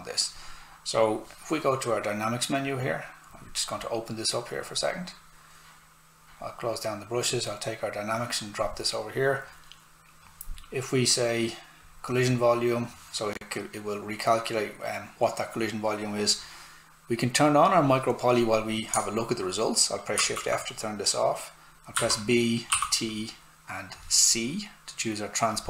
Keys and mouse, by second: 2.6 click, 11.8 click, 17.7 click, 20.1 shift+f, 21.9 b, 22.7 t, 25.5 click.